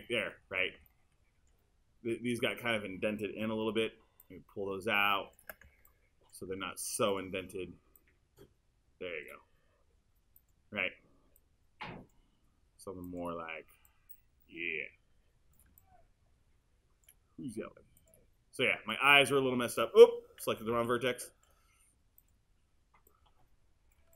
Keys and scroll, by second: 20.5 super+z.